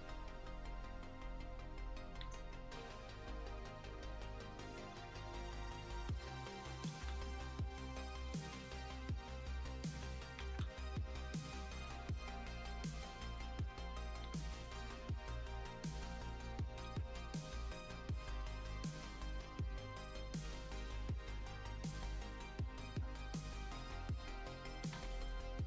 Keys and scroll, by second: 2.8 F2, 6.9 ctrl+z, 10.4 ctrl+z, 11.9 x, 14.2 ctrl+z, 16.8 x, 21.1 x, 23.8 x, 24.9 ctrl+z.